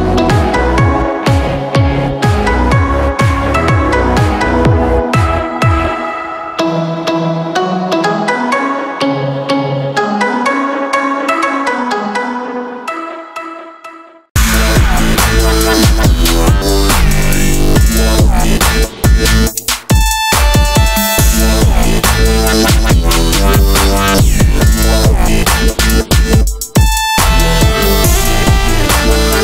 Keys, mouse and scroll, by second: 1.0 ctrl+0, 4.8 click, 8.5 click, 9.2 scroll down 1, 9.2 alt+scroll.